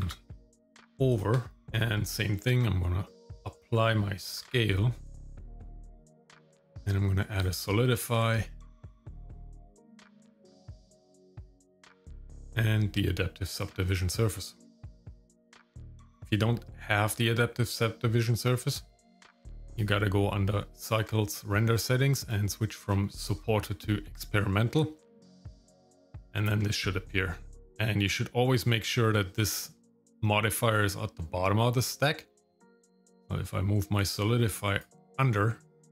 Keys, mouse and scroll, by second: 1.6 shift+middle click, 1.6-2.2 scroll up 1, 4.3 ctrl+a, 5.1-7.4 drag, 9.1-10.3 drag, 11.5 click, 11.9-13.9 drag, 14.9 click, 15.4 click, 19.7 click, 22.2-24.7 drag, 25.9 click, 32.5-34.8 drag.